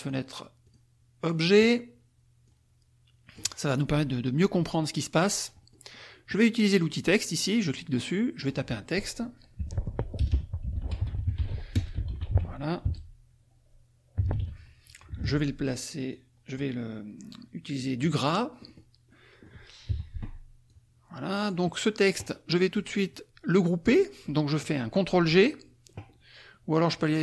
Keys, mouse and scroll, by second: 0.0 click, 0.7 click, 1.2 click, 2.4-3.6 drag, 5.2 click, 7.6 click, 8.3 click, 9.6 Caps_Lock, 9.7-12.9 typing, 13.9-14.8 typing, 15.2 ctrl+a, 16.1-18.1 drag, 18.6 middle click, 19.1 middle click, 19.9 F1, 20.6-21.7 drag, 26.9 right click.